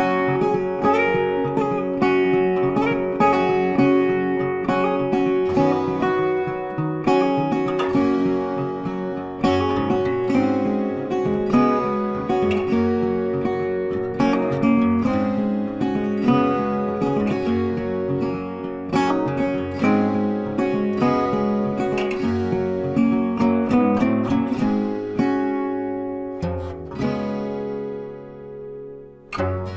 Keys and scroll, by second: 5.7 ctrl+space, 25.7 z, 26.6 space.